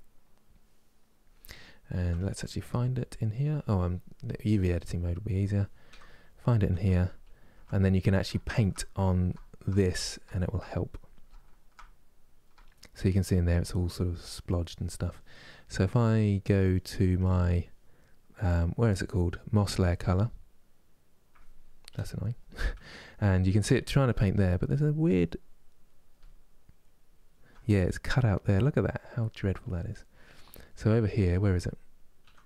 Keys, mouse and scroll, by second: 4.0 click, 16.9-32.4 drag.